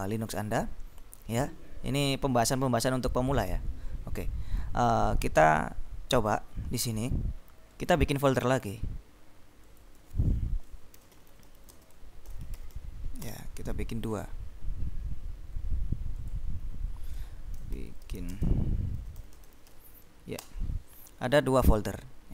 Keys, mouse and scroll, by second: 7.7 right click, 9.7 click, 10.8-13.3 typing, 13.4 Return, 14.2 right click, 16.3 click, 17.3-20.3 typing, 20.6 Return.